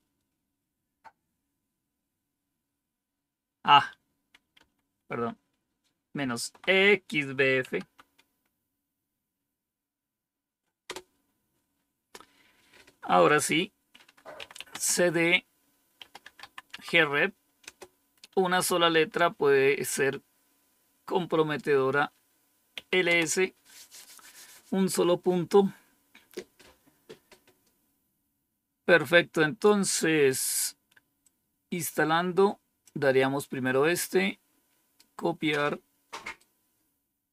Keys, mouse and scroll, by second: 4.5 Up, 5.0 Left, 5.7 typing, 6.0-7.5 Left, 7.5 x, 7.7 Delete, 10.8 Return, 14.0-16.8 typing, 17.5 Return, 22.4-23.3 typing, 31.1-32.8 drag, 33.8-34.9 right drag, 36.3 right click.